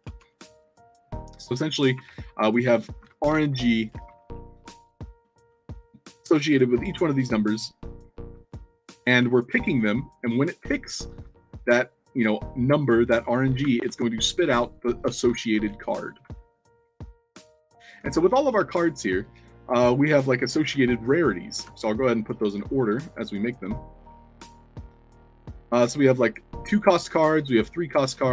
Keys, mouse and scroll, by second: 0.0 Tab, 1.3-7.1 typing, 2.1-2.5 alt+drag, 3.4 alt+click, 3.6 alt+drag, 8.8-10.3 typing, 12.2 w, 12.8 scroll up 1, 13.4-16.5 typing, 16.5-16.9 alt+drag, 17.0 alt+click, 17.5 alt+click, 17.8-18.6 typing, 18.7-19.8 alt+drag, 20.0 w, 20.1 space, 21.3 click, 22.3-23.9 shift+drag, 24.2 click, 24.9 shift+click, 26.3 click, 27.0 shift+click.